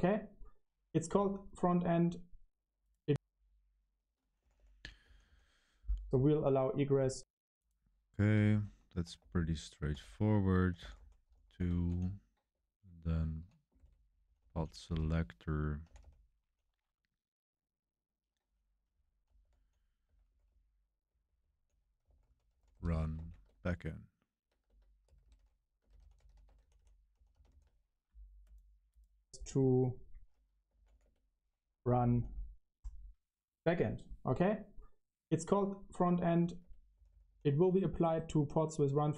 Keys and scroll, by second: 4.2-5.7 typing, 8.8-11.8 typing, 13.1 Escape, 13.5-16.4 typing, 18.1-27.9 typing, 30.4-31.3 typing, 32.7-33.5 typing, 36.0-39.1 typing.